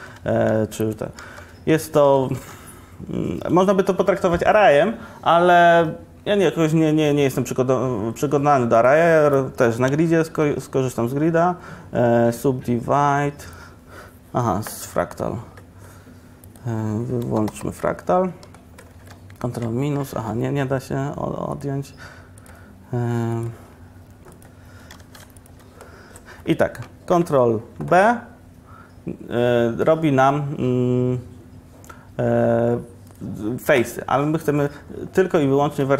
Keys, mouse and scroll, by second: 0.0 Tab, 0.6 x, 1.3 shift+a, 3.3 shift+a, 10.0 Tab, 10.5 w, 17.9-19.5 drag, 25.1 ctrl+z, 28.0 ctrl+b, 33.3-35.8 drag, 35.8 middle click.